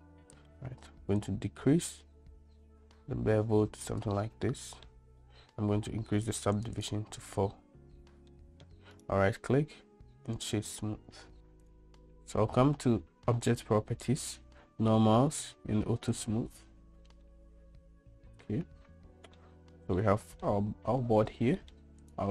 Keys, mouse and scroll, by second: 1.3-2.6 shift+drag, 2.6-4.1 shift+right drag, 4.5 middle click, 6.6 right click, 6.8 right click, 8.4-8.7 middle drag, 9.1-10.5 right drag, 16.2 click, 17.4-19.5 middle drag, 20.1-20.5 middle drag, 21.7 middle click.